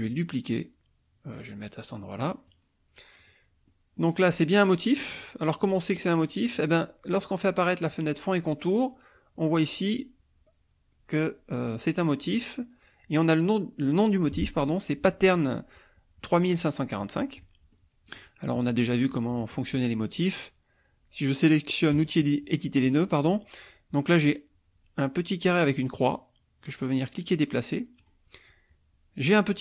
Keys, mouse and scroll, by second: 0.0 click, 1.3-2.7 drag, 3.2 click, 3.7 middle click, 3.7-4.2 scroll up 1, 17.7 middle click, 17.7-18.3 scroll up 1, 18.8 middle click, 18.8-19.5 scroll up 1, 22.1 click, 25.8-28.2 drag.